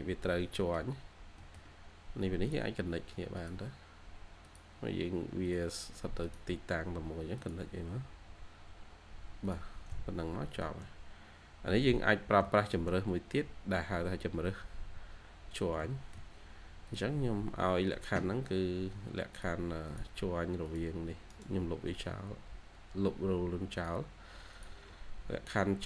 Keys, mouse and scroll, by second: 0.3 middle click, 0.8 scroll up 1, 0.9 scroll down 1, 1.1 scroll up 1, 1.3 middle click, 8.4 scroll down 1, 9.8 scroll down 1, 9.8 middle click, 10.7 shift+scroll down 1, 11.1 scroll up 1, 14.6 scroll down 1, 15.7 middle click, 21.2 right click.